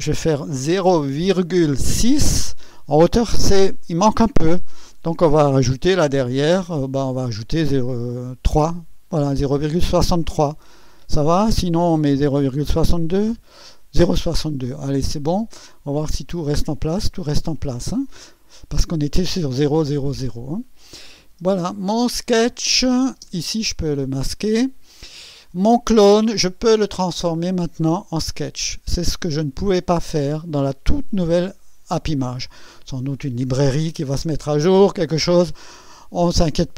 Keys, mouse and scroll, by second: 0.7 KP_0, 1.2 ,, 1.8 6, 6.6 click, 12.2 BackSpace, 13.0 2, 16.0 click, 22.5 click, 23.2 space, 25.9 click.